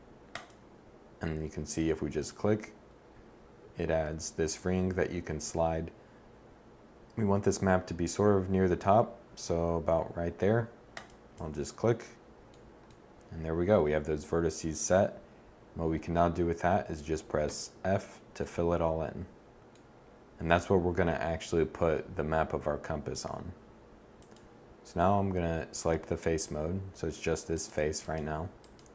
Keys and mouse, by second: 17.1 f.